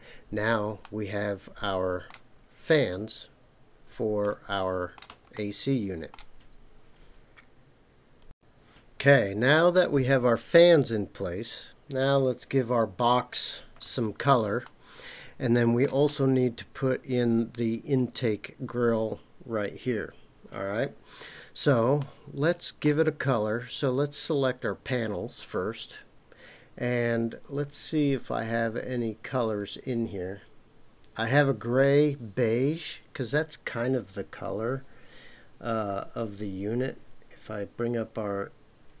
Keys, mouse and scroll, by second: 0.8-2.1 middle drag, 2.4-3.6 scroll down 2, 4.2-5.0 shift+middle drag, 5.3 middle click, 14.6-15.8 middle drag, 22.0-22.8 shift+middle drag, 23.7 click, 29.5-39.0 drag.